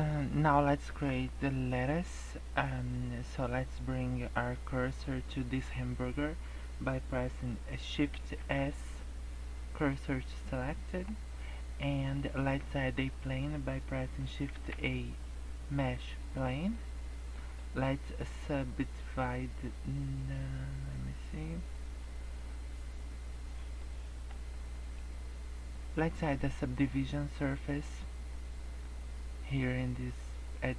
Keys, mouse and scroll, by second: 8.3 shift+s, 10.4 middle click, 14.5 shift+a, 16.7 middle click, 19.6 middle click, 21.6 scroll up 1, 22.1 middle click, 24.0 middle click, 24.4 scroll down 2, 24.6 middle click, 25.2-26.9 scroll up 1.